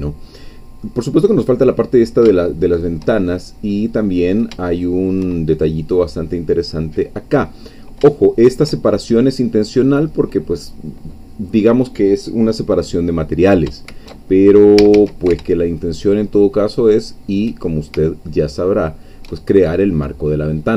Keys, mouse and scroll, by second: 2.0 scroll up 2, 2.4-3.8 shift+middle drag, 4.0-4.5 scroll up 2, 4.6 shift+middle click, 6.1-7.8 scroll down 2, 8.3 shift+middle click, 9.8-11.5 scroll down 2, 11.5-13.6 scroll up 2, 14.4 alt+shift+scroll down 3, 14.8 a, 15.9-17.4 alt+shift+drag.